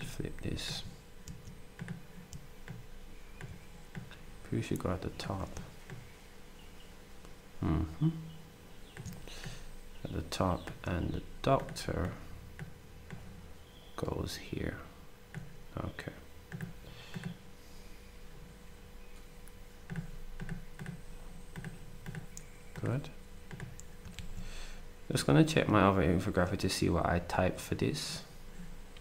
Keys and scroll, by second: 24.1 ctrl+s.